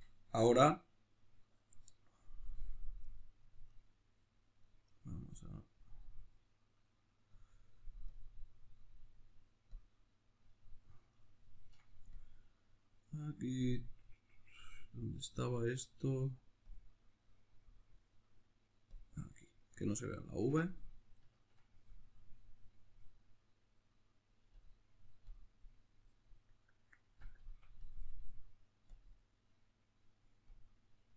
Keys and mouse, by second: 9.8 click, 12.2-29.0 drag.